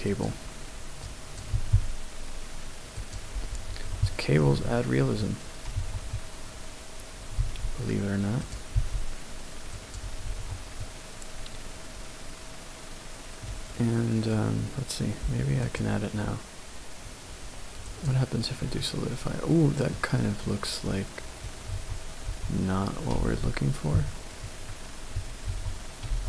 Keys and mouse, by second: 0.1 click, 1.0 click, 1.6 g, 3.0 click, 3.8 Tab, 4.6-5.2 shift+drag, 5.9 Tab, 7.4 e, 8.5 click, 8.9 e, 9.8 click, 10.4 Tab, 10.8-11.8 middle drag, 13.2 middle click, 15.7-18.3 drag, 19.1-20.2 middle drag, 21.1-21.8 middle drag, 21.8 Tab, 22.4 Tab, 24.1 ctrl+z, 24.1 middle click, 25.6 Tab.